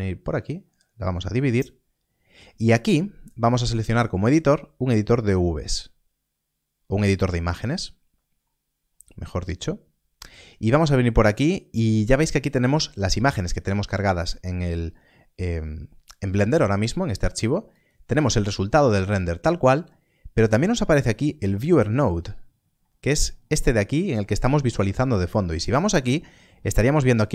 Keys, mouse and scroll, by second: 0.0 click, 8.4-9.1 scroll up 1, 10.2 click, 17.7 click, 18.5-19.4 scroll down 1, 20.3 click, 25.6 click, 26.5-27.3 scroll up 1.